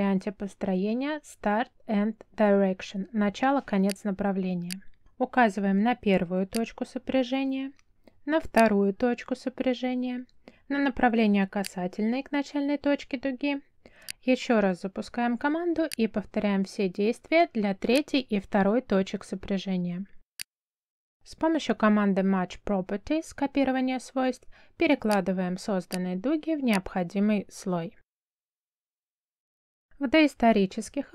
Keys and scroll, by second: 22.2 m, 24.1 space, 28.2 Escape.